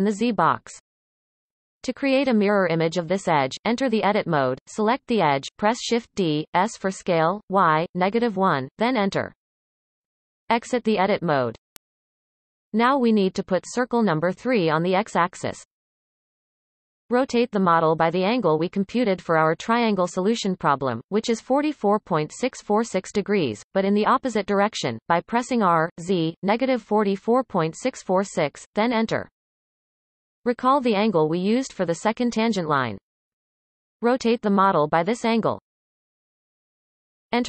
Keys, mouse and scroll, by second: 2.3 Tab, 3.5 shift+d, 4.6 s, 9.0 Tab, 12.9 r, 31.1 right click, 35.3 r.